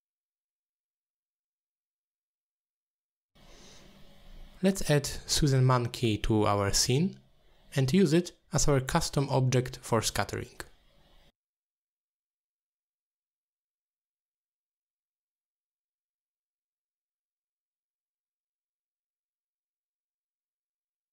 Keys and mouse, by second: 1.4-4.8 drag, 9.8 middle click, 10.7-11.4 drag, 11.8 middle click, 12.1 shift+right click, 12.5 shift+a, 15.7 s, 19.2 ctrl+a.